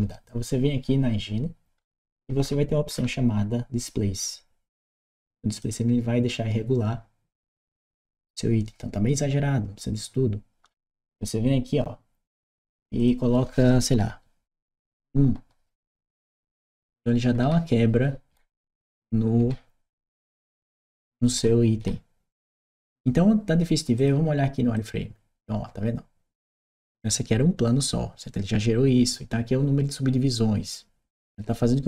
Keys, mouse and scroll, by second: 5.4 click, 12.7 click, 14.4 Return, 15.5-19.3 right drag, 16.2 w, 16.6 a, 19.2 a, 23.7 click, 24.5 click.